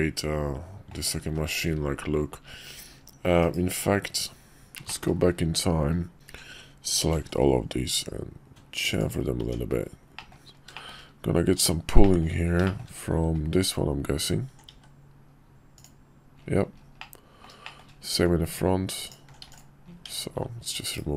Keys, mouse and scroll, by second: 1.2 ctrl+z, 3.4 ctrl+z, 3.5 /, 4.8 shift+middle click, 7.0 ctrl+b, 9.4 Tab, 10.1 middle click, 10.7 shift+middle click, 12.0 middle click, 12.6 shift+middle click, 13.6 alt+click, 14.2 alt+click, 14.7 x, 17.0 click, 17.4 middle click, 17.6 shift+click, 17.8 shift+middle click, 19.0 alt+click, 19.4 x, 20.0 Tab, 20.9 /.